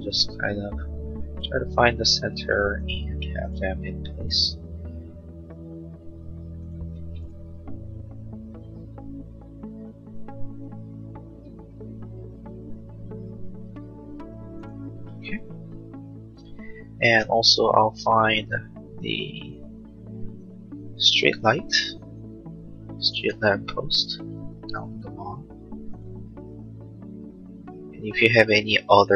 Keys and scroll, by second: 15.0 space.